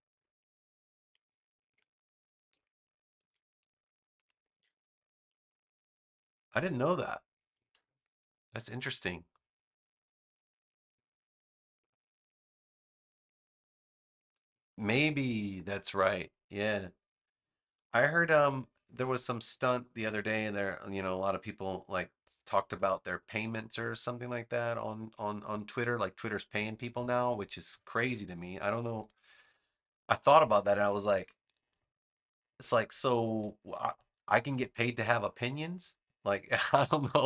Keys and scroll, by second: 1.0 space, 3.1 a, 3.6 space, 4.4 a, 23.1 space, 28.6 super+-, 29.9 space, 34.1 super+g.